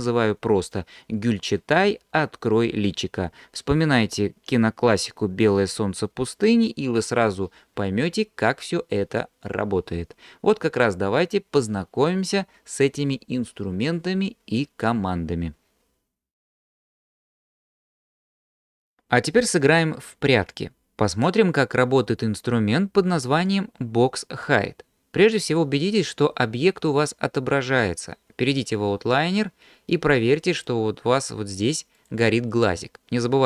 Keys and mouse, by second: 30.6 click, 32.0 click.